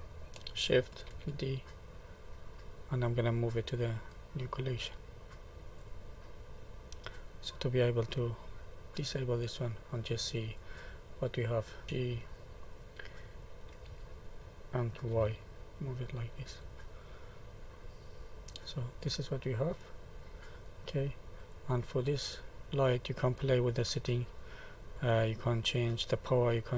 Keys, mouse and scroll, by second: 1.1 shift+d, 4.0 click, 7.5 click, 8.8 click, 9.7 middle click, 10.6-11.2 scroll down 3, 11.2 middle click, 11.8 g, 16.9 middle click, 18.0-18.8 scroll up 3, 18.8 middle click, 20.1 middle click, 21.4 click, 22.5 middle click.